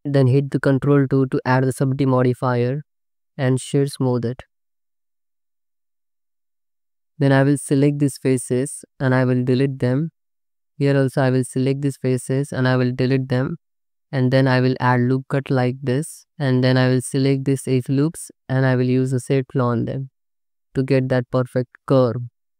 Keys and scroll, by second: 0.6 ctrl+2, 5.1 Tab, 6.8 3, 9.1 x, 11.7 3, 12.2 x, 14.0 2, 14.4 ctrl+r, 15.9 ctrl+r.